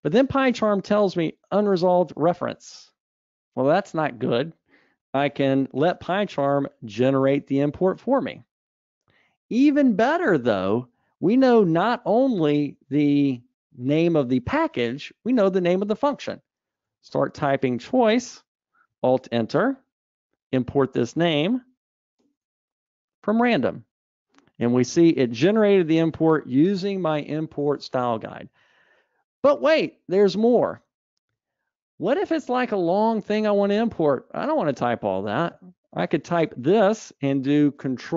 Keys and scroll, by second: 6.8 alt+Return, 19.8 alt+Return, 30.8 super+z, 31.3 super+z.